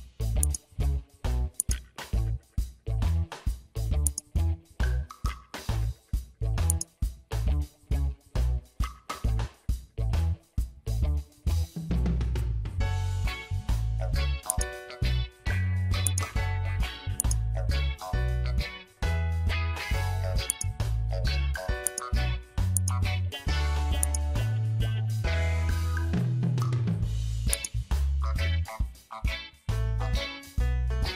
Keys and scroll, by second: 2.6 ctrl+t, 11.5 Return, 29.9 ctrl+j.